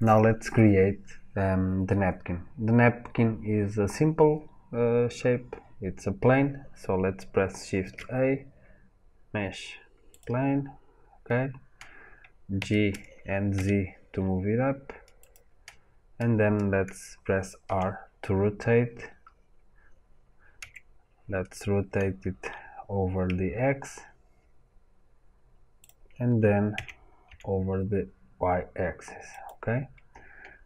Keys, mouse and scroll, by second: 12.5 g, 13.1-17.6 right drag, 17.6 r, 25.8 click, 26.7 r.